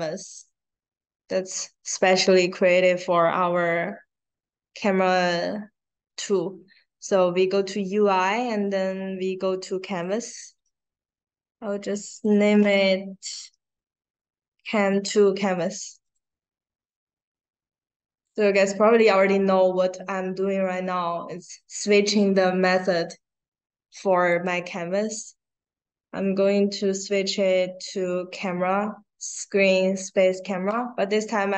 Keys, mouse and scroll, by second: 9.8 click, 11.0 click, 12.0 click, 14.1 a, 14.5 space, 15.6 space, 16.0 click, 16.7 click, 18.2 click, 24.2 click, 28.3 click.